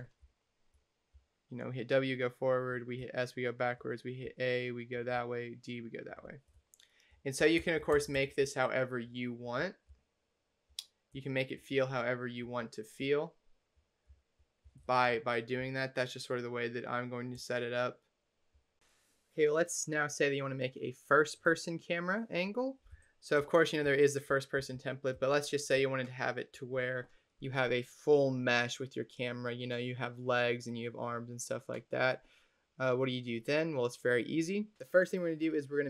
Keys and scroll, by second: 0.1 d, 1.0 w, 2.8 s, 4.1 a, 5.0 d, 6.7-9.7 typing, 10.9 s, 11.6 w, 12.3 d, 12.9 a, 14.0 w, 14.5 w, 14.7 space, 15.5 w, 17.2 space.